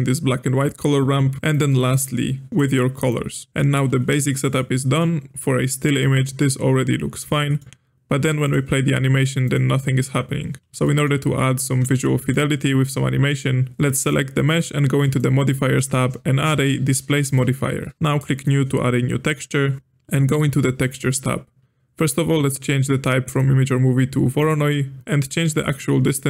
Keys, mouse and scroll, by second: 1.4 middle click, 1.5-3.5 drag, 3.5-8.4 middle drag, 8.4 click, 9.7-10.7 middle drag, 10.8-13.7 middle drag, 14.0 click, 15.0 click, 16.4-18.0 drag, 18.0 ctrl+z, 18.3 click, 20.8 click, 23.2-25.0 drag, 25.6-26.2 drag.